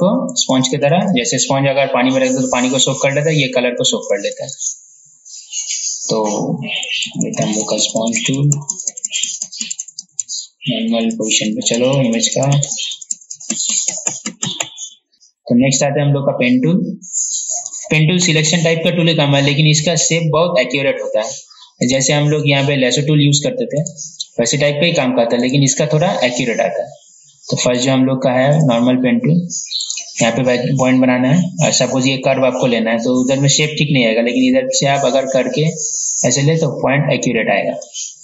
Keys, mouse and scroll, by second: 6.9 ctrl+z, 7.1 ctrl+z, 7.3 ctrl+z, 7.5 ctrl+z, 7.7 ctrl+z, 7.8 ctrl+z, 8.0 ctrl+z, 8.2 ctrl+z, 8.4 ctrl+z, 8.6 ctrl+z, 8.7-9.1 typing, 9.7 ctrl+z, 10.0 ctrl+z, 12.7 ctrl+z, 15.1 right click, 15.9 click, 22.1 right click, 28.8-38.2 drag.